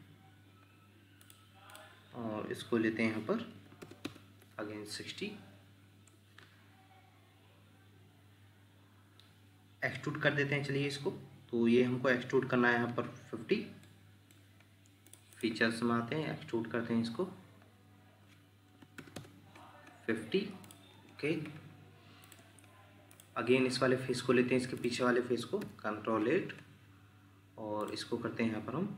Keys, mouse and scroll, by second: 1.7 double click, 4.0 Return, 4.0 0, 13.8 middle click, 15.3 double click, 18.7 typing, 19.2 Return, 22.4 Escape, 25.6 ctrl+8.